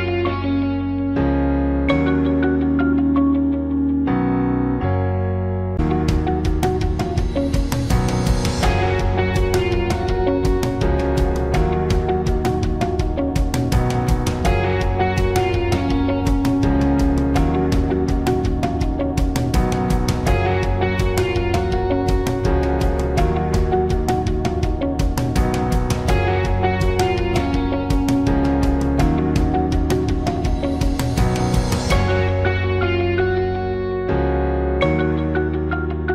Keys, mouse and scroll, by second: 0.7 ctrl+c, 5.1 ctrl+v.